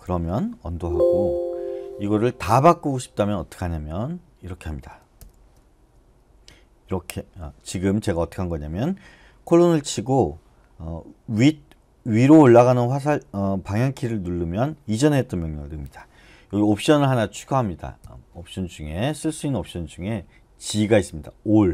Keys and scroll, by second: 0.7 Escape, 1.1 u, 5.2 shift+;, 18.0 typing.